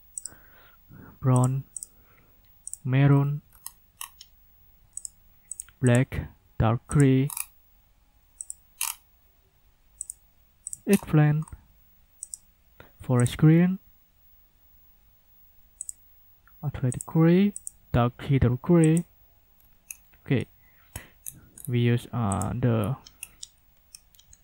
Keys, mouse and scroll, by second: 0.2 click, 1.4 click, 1.8 click, 2.7 click, 3.0-4.2 scroll down 4, 5.0 click, 5.5 click, 5.9 click, 6.9 click, 7.2 scroll down 1, 8.4 click, 8.7 scroll down 2, 10.0 click, 10.7 click, 10.9-11.6 scroll down 2, 12.2 click, 13.2 click, 13.5 scroll down 1, 15.8 click, 16.9 click, 17.6 click, 18.8 click, 19.5-20.0 scroll down 2, 20.3 scroll down 2, 22.3 click, 22.8-23.1 scroll up 2, 23.5-24.4 scroll up 8.